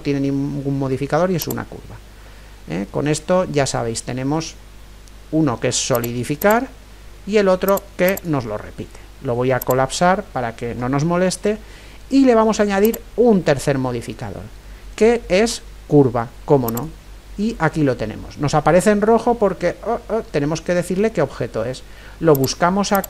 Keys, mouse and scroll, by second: 2.2-4.2 middle drag, 5.9-11.5 drag, 12.8-14.7 drag, 22.4-23.0 drag.